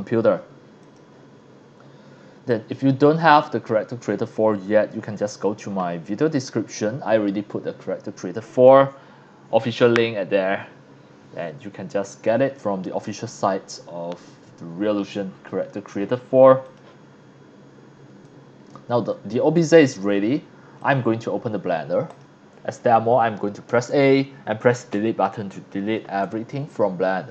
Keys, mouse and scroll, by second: 0.8 click, 2.5-2.9 drag, 16.6 click, 18.2-18.7 drag, 20.8 click, 22.1 click, 24.9 Delete, 26.2 scroll up 1.